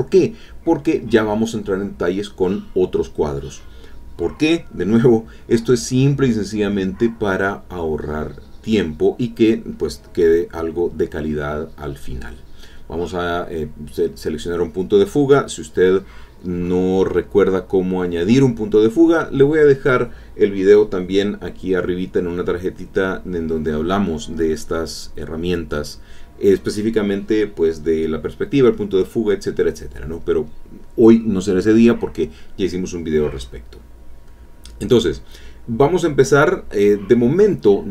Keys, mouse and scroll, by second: 2.3 click, 4.2 click, 6.9 click, 8.2 click, 11.1-13.1 drag, 13.1 middle click, 14.7-21.7 drag, 22.0 middle click, 22.8 middle click, 27.7 click, 34.0 click, 35.3-37.9 drag.